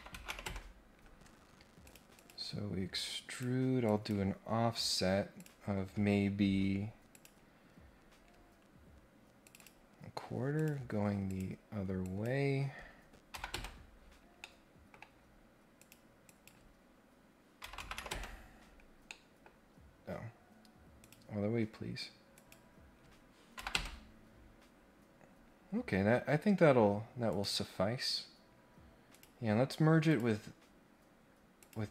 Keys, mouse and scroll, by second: 1.8 click, 2.1 click, 3.3 click, 3.8 click, 5.3 click, 7.1 click, 7.7 scroll up 1, 7.9 scroll down 1, 8.1 scroll up 1, 9.4 click, 10.5 click, 11.3 click, 12.0 click, 14.3 middle click, 15.8 click, 16.2 click, 19.0 middle click, 21.0 click, 22.3 click, 24.7 scroll down 1, 25.2 scroll up 1, 27.3 click, 29.1 click, 30.0 click, 31.6 click.